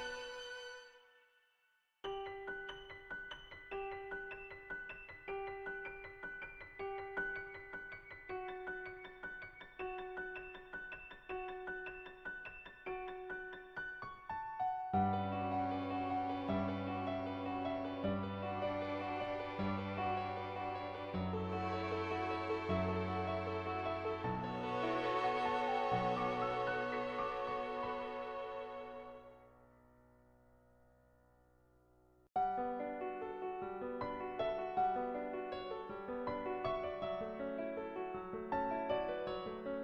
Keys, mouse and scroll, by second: 0.9 ctrl+z, 1.3-3.0 drag, 5.2 [, 5.5 [, 5.6 [, 5.7 click, 9.1 [, 9.2 [, 9.4 click, 9.4 [, 10.3 click, 11.0 ctrl+z, 11.0 ], 11.2 ], 11.3 ], 11.3 click, 14.3 middle click, 15.9 shift+click, 16.7 shift+click, 17.0-18.0 middle drag, 18.7 click, 20.1 middle click, 20.4 shift+click, 20.8 middle click, 21.6 middle click, 22.1 shift+click, 22.7-24.1 drag, 26.2 click.